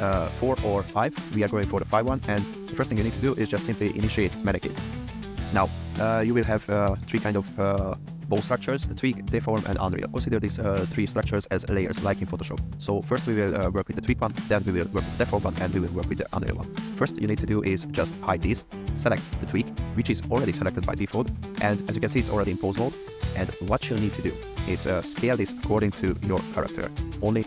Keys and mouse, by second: 0.4-0.9 drag, 4.0 click, 4.9-5.3 middle drag, 6.6 click, 17.6 click, 18.0 click, 19.0 click, 23.7 click, 25.5 s, 27.1 click.